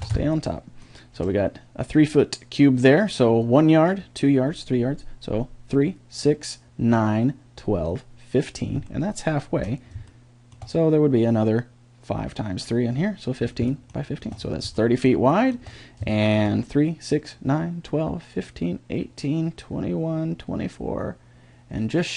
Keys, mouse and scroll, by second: 9.0-12.3 middle drag, 12.9-13.9 middle drag.